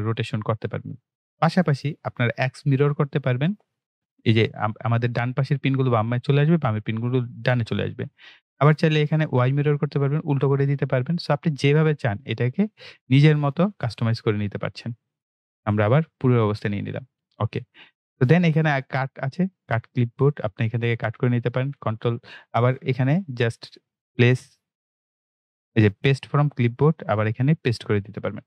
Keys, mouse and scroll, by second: 2.8 click, 9.5 click, 13.7 click, 16.2 click, 19.6 click, 21.7 ctrl+v, 22.5 right click, 26.4 click.